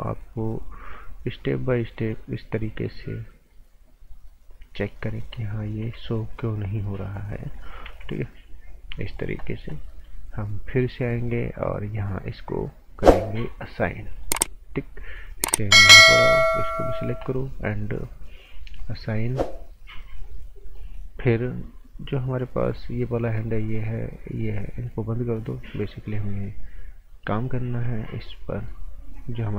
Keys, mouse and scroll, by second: 4.8 scroll up 1, 5.1 right click, 5.5-5.8 scroll up 1, 6.0 alt+right click, 6.3-7.8 scroll up 1, 7.8 g, 8.5-8.9 scroll down 1, 8.9 click, 9.9 right click, 13.0 click, 16.2 g, 16.6 click, 20.2 right click, 23.2 click, 28.1 scroll down 1, 28.4 right click, 29.0-29.5 scroll up 1.